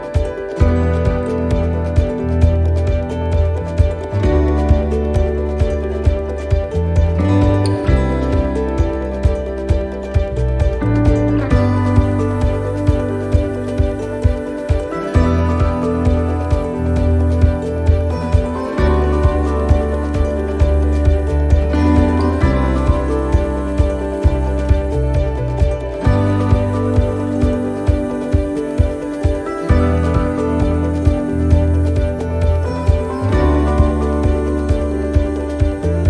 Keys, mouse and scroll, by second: 1.2 click, 8.8 middle click, 10.9 e, 13.1 middle click, 13.4-13.7 scroll up 2, 13.9 shift+middle click, 14.8 right click, 15.5 shift+right click, 16.9 shift+right click, 17.8 shift+right click, 18.4 shift+right click, 18.4 shift+middle click, 19.1 middle click, 19.7 shift+middle click, 20.6 shift+right click, 21.4 shift+right click, 21.6 shift+middle click, 22.7 shift+right click, 23.6 shift+middle click, 24.6 shift+right click, 25.1 middle click, 25.6 shift+middle click, 26.7 shift+right click, 27.3 shift+right click, 28.1 shift+right click, 28.2 middle click, 28.7 shift+middle click, 29.6 shift+right click, 29.9 shift+middle click, 30.8 scroll down 2, 31.1 middle click, 32.4 shift+right click, 32.7 middle click, 34.1 click, 34.8 click, 35.4 middle click.